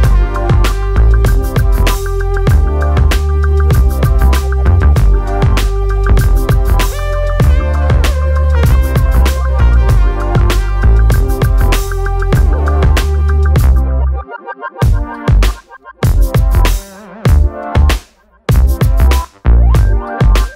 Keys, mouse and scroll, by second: 1.1-3.2 drag, 3.2 shift+middle click, 3.4 scroll up 1, 3.6-4.9 drag, 4.9-5.2 scroll down 1, 5.2 click, 6.4-8.6 right drag, 9.3 click, 10.2 z, 10.3 middle drag, 10.5-11.5 scroll down 4, 11.6-12.6 drag, 12.6 t, 13.2 alt+a, 13.3 ctrl+space, 13.8 click, 14.0 ctrl+space, 15.0 ctrl+middle click, 15.7 z, 16.2 scroll up 1, 16.5 middle click, 16.6 scroll down 1, 16.7 click.